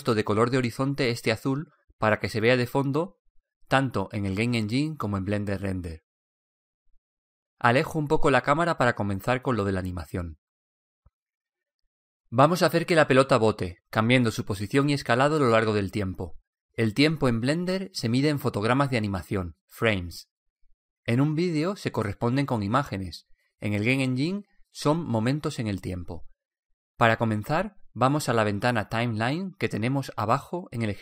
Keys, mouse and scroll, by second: 0.0-1.7 drag, 9.2-12.5 middle drag.